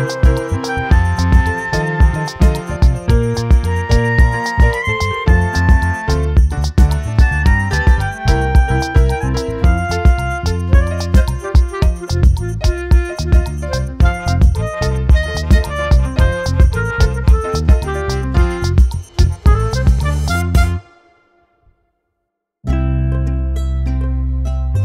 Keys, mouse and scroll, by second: 0.0 click, 0.9 click, 4.3 shift+right click, 6.3 click, 7.4 scroll up 2, 8.9 click, 10.9 click, 11.2-11.7 drag, 11.9-12.5 scroll up 1, 12.5-13.6 scroll up 3, 13.6-15.2 scroll down 4, 15.5 shift+middle click, 16.3 right click, 17.6-18.3 scroll down 2, 18.3-18.7 scroll up 2, 20.1-20.7 drag, 20.7-21.3 scroll up 2, 21.3 scroll down 2, 21.9 scroll up 2, 23.1 click, 24.7 click.